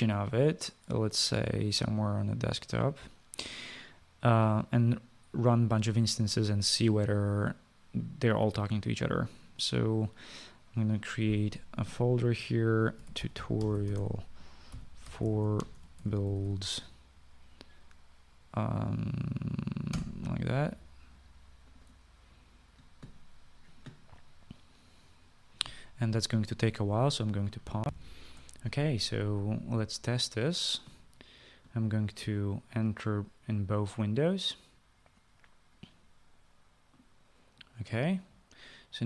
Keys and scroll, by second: 13.7-17.4 typing, 20.9 Return, 20.9 typing, 28.9 shift+F9, 28.9 shift+F9.